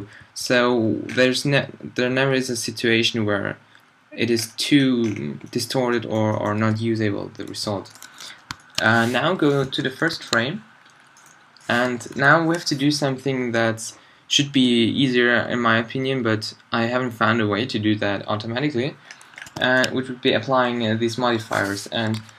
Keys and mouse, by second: 0.1 Left, 0.3 Left, 0.4 Left, 0.7 Left, 1.5 Left, 2.1 Left, 2.6-4.2 Left, 4.4 Left, 7.3 shift+Left, 9.3 z, 11.8 z, 14.5-19.3 drag, 22.1 alt+z.